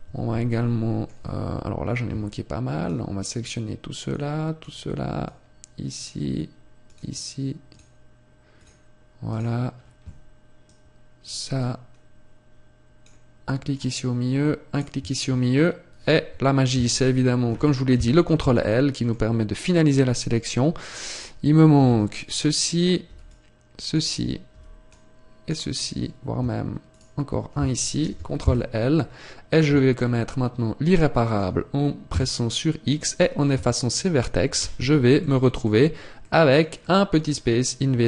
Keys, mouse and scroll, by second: 0.4 shift+middle click, 2.0 c, 16.4 scroll down 1, 17.5 ctrl+l, 18.5 shift+middle click, 19.3 scroll up 2, 26.9 shift+right click, 27.9 ctrl+l, 28.3-28.9 scroll down 1, 28.9 scroll down 5, 29.1-29.5 scroll up 3, 29.9 shift+middle click, 33.5 Tab, 34.5 z, 35.1 middle click, 36.5 middle click.